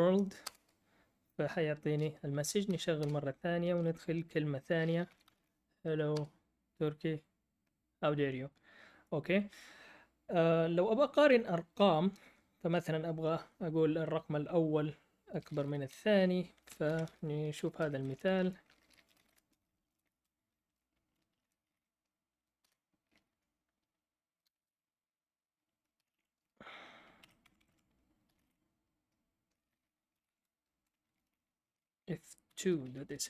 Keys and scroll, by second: 0.0-0.4 typing, 3.0 Return, 3.0 Up, 3.0 typing, 4.7-5.8 typing, 6.1 Return, 16.8 ctrl+l, 17.3-23.8 typing, 25.7-26.6 typing, 27.2 Tab, 27.4 Caps_Lock, 27.4 Escape, 27.5 Escape, 27.7 Escape, 28.0-28.8 typing, 29.9-33.2 typing.